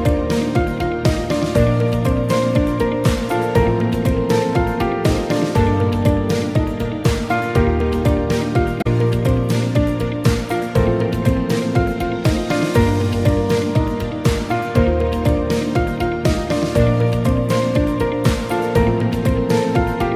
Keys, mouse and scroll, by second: 2.2 right click.